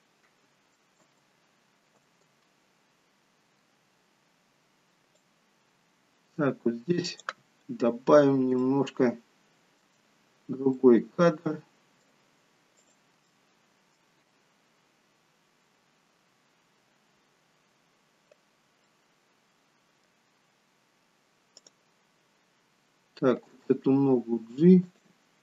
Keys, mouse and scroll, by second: 1.0 space, 2.5 space, 5.3 click, 7.6-10.2 scroll up 6, 8.6 shift+middle click, 10.8 middle click, 12.8 click, 13.2 middle click, 18.8 middle click, 21.5 click, 23.6 g.